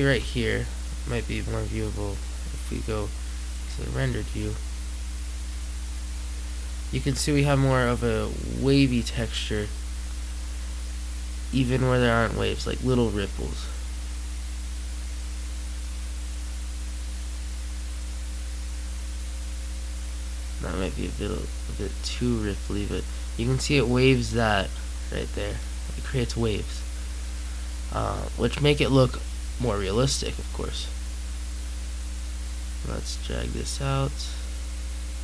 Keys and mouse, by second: 0.0 Escape, 4.1-5.7 middle drag.